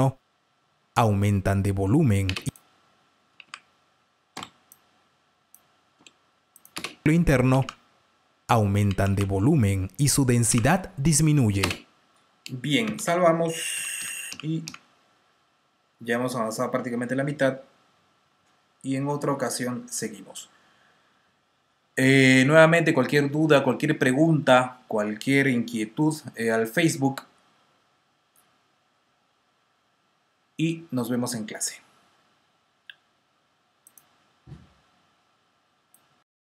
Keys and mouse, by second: 2.2-7.5 typing, 2.6 click, 6.4 click, 8.8 typing, 10.4 typing, 11.5 space, 12.8 super+s, 13.7-14.6 typing, 33.8 click.